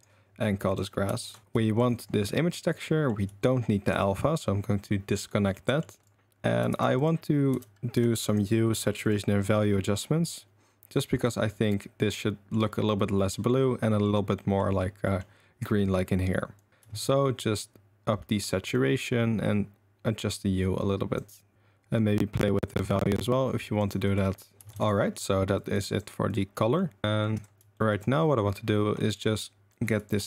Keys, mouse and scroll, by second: 0.6-1.7 drag, 1.4 s, 1.9 click, 2.7 click, 5.5 click, 6.7 shift+a, 12.1-12.5 middle drag, 13.3 middle drag, 14.3 middle click, 15.0 middle click, 16.6 click, 17.3-18.4 shift+drag, 18.8-21.1 shift+drag, 21.5-23.8 shift+drag, 24.1 click, 24.8 ctrl+s, 25.6 ctrl+click, 26.3 click, 26.6 click, 27.0 drag, 27.4 drag, 27.7 shift+drag, 28.2 click, 29.0 click, 30.0 ctrl+drag.